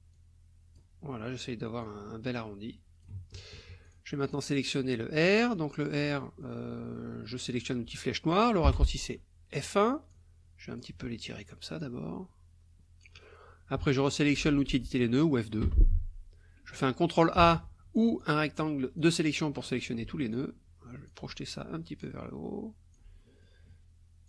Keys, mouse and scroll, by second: 0.1 click, 1.8-3.2 drag, 3.8 click, 4.2 click, 6.1 click, 8.6 F1, 10.1 click, 11.8-13.2 drag, 15.6 F2, 17.4 ctrl+a, 18.0-19.2 ctrl+drag, 20.3 alt+click, 22.0-23.1 alt+drag, 23.2 alt+click.